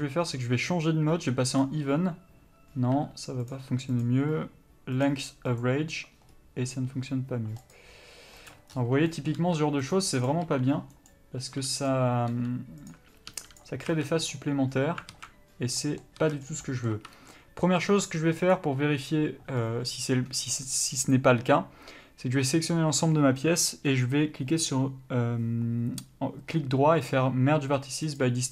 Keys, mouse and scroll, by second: 5.2 u, 7.9 click, 9.6 g, 10.4 click, 10.6 g, 12.1 click, 12.5 g, 13.1 click, 13.5 g, 13.8 click, 14.1 a, 14.2 middle click, 15.3 alt+a, 16.0 middle click, 16.4 a, 16.6 scroll down 1, 16.8 middle click, 17.1 1, 17.5-17.8 scroll up 1, 17.8 middle click, 18.2-18.6 scroll up 1.